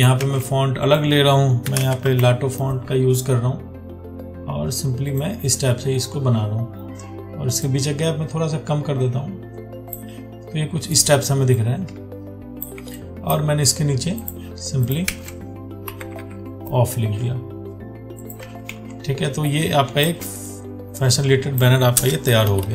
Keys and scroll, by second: 0.4 ctrl+a, 15.3 ctrl+a, 18.9 ctrl+t.